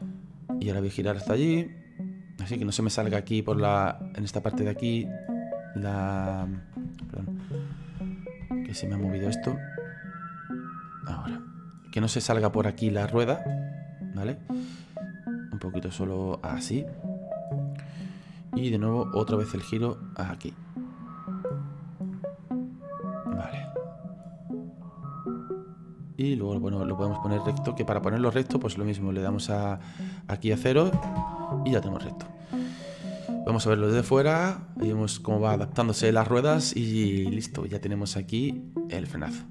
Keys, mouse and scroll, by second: 1.3 click, 6.5 ctrl+z, 7.1 ctrl+z, 8.0 ctrl+z, 8.5 ctrl+z, 11.0 click, 14.4 click, 19.2 click, 25.0-32.7 drag, 33.4 click, 34.0 space.